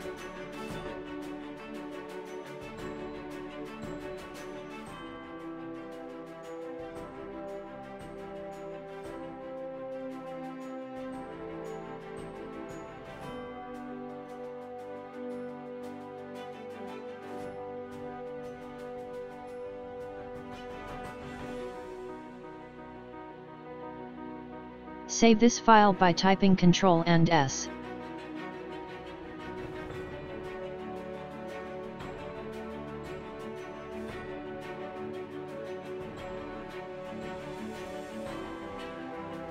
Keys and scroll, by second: 1.9 ctrl+v, 23.2 ctrl+s, 37.0 Right.